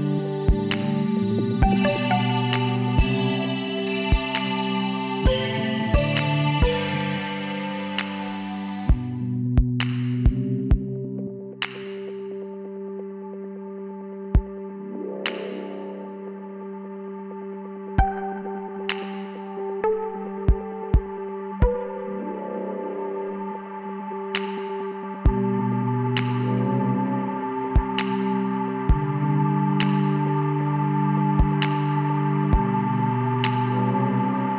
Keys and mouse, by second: 2.9-6.8 drag, 6.8 w, 14.2-15.8 drag, 16.0 s, 19.1 click, 20.2 KP_1, 20.8 KP_3, 22.1 KP_9, 25.4 click, 26.1 middle click, 26.3 e, 31.2-34.5 middle drag.